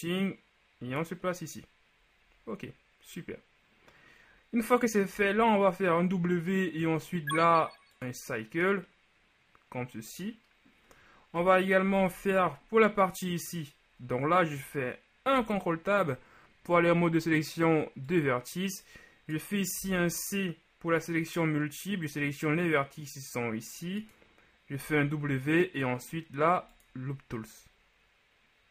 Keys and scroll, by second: 11.5 KP_3, 12.1 z, 15.4 ctrl+Tab, 19.9 c, 25.0 w.